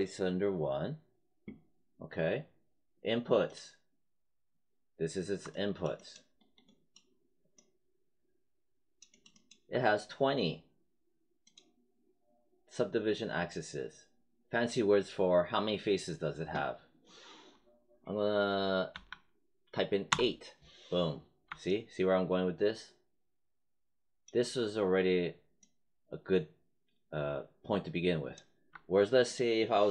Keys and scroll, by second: 18.8 8, 20.0 Return.